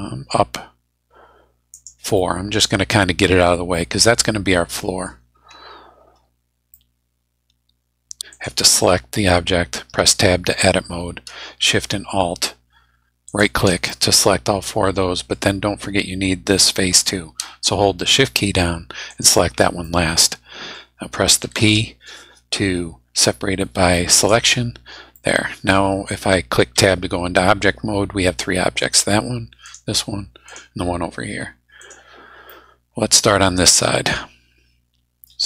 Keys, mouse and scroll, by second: 1.7 click, 2.2 middle click, 2.6-3.0 scroll down 2, 3.7-5.2 middle drag, 5.6 scroll up 2, 6.1 scroll up 2, 6.7-8.2 middle drag, 8.3 click, 9.7 Tab, 13.3 alt+shift+click, 13.8-15.5 alt+shift+middle drag, 19.1 shift+right click, 19.8 shift+click, 20.1 middle click, 21.4 p, 24.2 click, 25.1 middle click, 26.7 Tab, 28.8 right click, 29.6 right click, 30.5 right click, 31.8 right click, 32.5-35.4 middle drag.